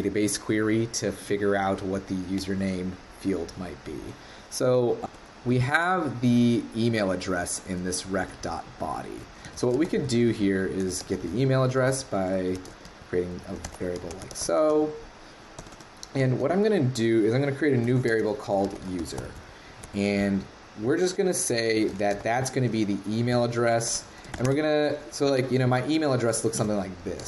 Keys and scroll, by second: 26.6 super+/.